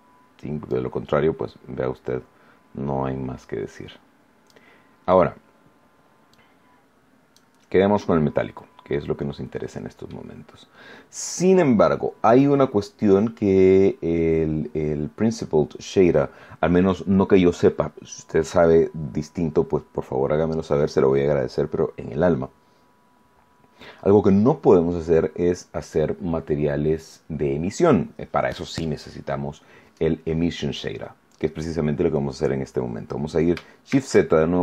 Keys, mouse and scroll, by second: 0.6-4.6 drag, 6.3-7.5 drag, 8.4 scroll down 1, 8.9-10.2 middle drag, 10.4 scroll up 1, 10.7-11.8 drag, 16.2 scroll down 1, 33.8 shift+z.